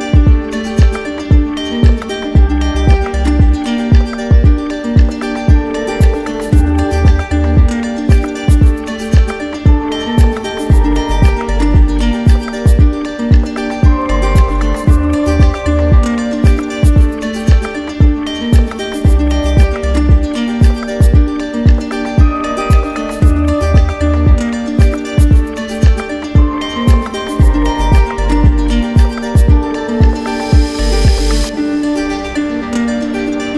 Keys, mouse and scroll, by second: 1.6 alt+click, 3.9 click, 6.0 click, 7.0 click, 7.6 click, 8.1 click, 8.7 shift+click, 9.1 shift+click, 9.2 shift+click, 10.0 ctrl+z, 11.4 ctrl+z, 12.7 shift+click, 13.2 shift+click, 14.6 click, 15.0 ctrl+z, 16.2 click, 17.0 shift+click, 17.4 shift+click, 17.8 shift+click, 18.1 shift+click, 18.2 shift+click, 19.3 right click, 20.1 shift+right click, 20.5 right click, 20.8 shift+right click, 21.2 shift+right click, 22.3 shift+right click, 22.7 shift+right click, 23.1 shift+right click, 23.5 shift+right click, 23.9 shift+right click, 24.2 shift+click, 24.6 shift+click, 25.1 shift+click, 25.6 shift+click, 25.9 shift+click, 26.1 shift+click, 26.5 shift+click, 27.0 shift+click, 27.3 shift+click, 27.9 right click, 28.4 right click, 29.7 right click, 30.9 shift+click, 31.6 right click, 33.3 shift+click.